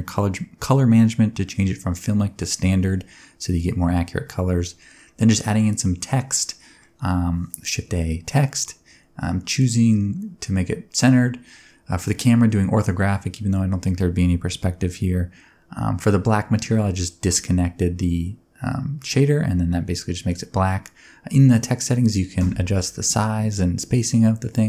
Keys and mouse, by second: 1.4 middle click, 1.5 Tab, 1.8 BackSpace, 2.2 shift+l, 2.4 space, 2.4 shift+r, 2.6 Tab, 3.2 click, 3.5 click, 4.0 click, 4.7 click, 5.6 click, 6.1 click, 6.3 click, 8.3 middle click, 9.3 click, 10.3 click, 13.0 click, 13.2 click, 13.6 click, 14.2 click, 14.8 click, 15.0 g, 15.1 z, 19.7 middle click, 21.0 shift+middle click, 22.1 shift+middle click, 22.8 shift+middle click, 23.2 click.